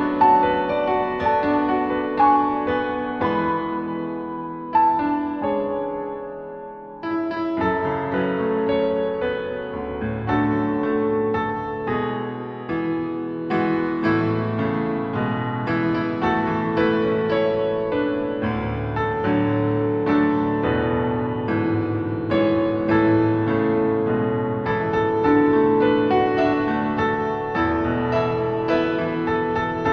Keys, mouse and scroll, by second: 0.3 click, 4.4 click, 5.4 click, 8.7 click, 9.7 click, 11.7 click, 15.3 click, 17.3 click, 22.3 click, 27.1 click.